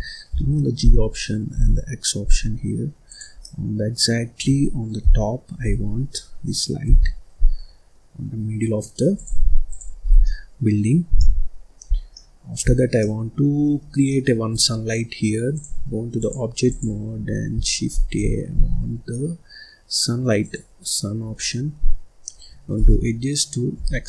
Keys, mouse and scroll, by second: 0.2 g, 3.4-4.9 middle drag, 4.9 KP_7, 5.8-6.8 scroll up 4, 6.8 g, 9.6 click, 10.0 scroll down 1, 10.2 middle click, 10.8-11.2 scroll up 1, 11.2 middle click, 11.9 scroll down 4, 12.1 middle click, 12.6-13.0 scroll down 1, 13.0 middle click, 13.5-13.8 scroll up 1, 13.8 scroll down 1, 14.0 middle click, 14.5-15.5 right drag, 15.5 click, 16.1 click, 17.9 shift+a, 21.3 scroll up 1, 21.7-22.8 scroll down 1, 22.8 g.